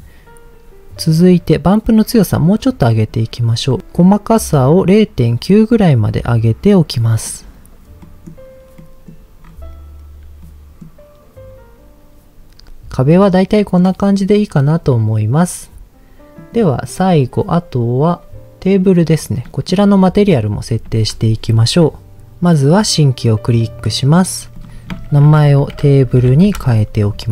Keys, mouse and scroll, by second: 1.9-3.1 drag, 3.8 middle click, 4.0 click, 4.6-7.2 drag, 8.1 middle click, 8.7 scroll up 1, 8.8 middle click, 9.4-9.8 scroll up 2, 10.4 middle click, 12.7 scroll down 2, 13.1 middle click, 14.6 scroll down 2, 16.4 click, 17.9-18.4 scroll up 2, 18.4-18.8 scroll down 2, 18.8 click, 19.4 middle click, 19.7-20.2 scroll up 3, 20.2 click, 20.9 ctrl+s, 22.6 click, 23.2-23.8 scroll down 2, 23.6 middle click, 24.6-26.5 drag.